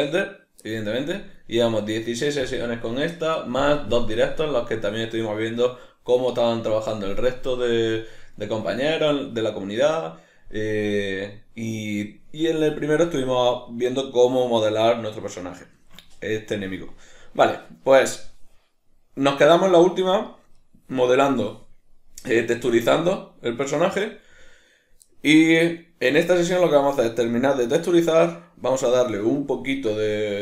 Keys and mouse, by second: 1.6-30.4 middle drag.